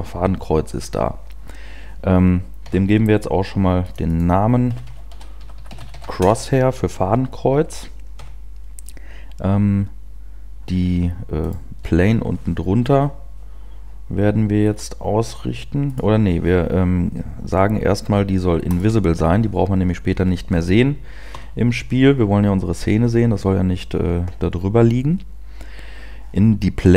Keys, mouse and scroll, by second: 2.8 n, 3.8 click, 4.7 click, 10.1 n, 11.9 right click, 18.6 click, 22.7 p.